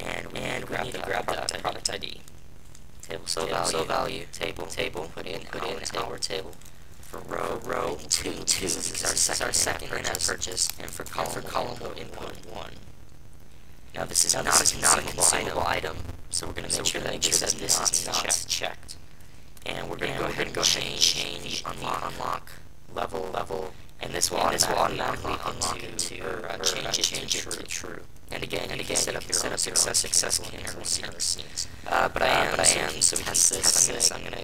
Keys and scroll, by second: 7.0 Right, 7.2 Right, 7.2 Right, 7.3 Right, 7.9 BackSpace, 8.1 BackSpace, 8.2 BackSpace, 9.1 Right, 9.3 Right, 9.4 Right, 10.0 Right, 10.4 BackSpace, 10.5 BackSpace, 10.9 BackSpace.